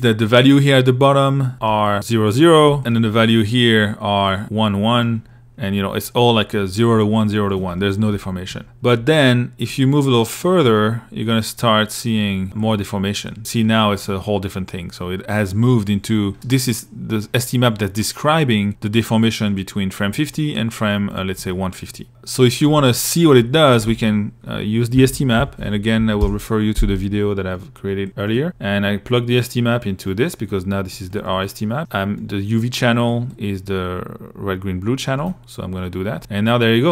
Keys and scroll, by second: 23.1 alt+Tab, 23.7 Tab, 24.0-25.1 typing, 25.2 Down, 25.4 Return, 30.9 i, 36.5 i.